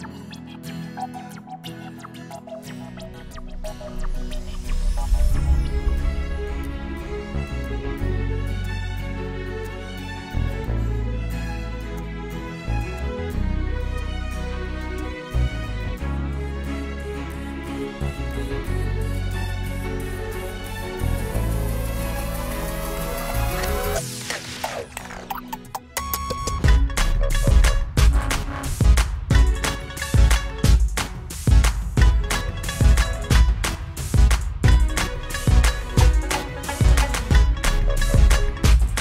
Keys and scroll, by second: 0.0-1.1 typing.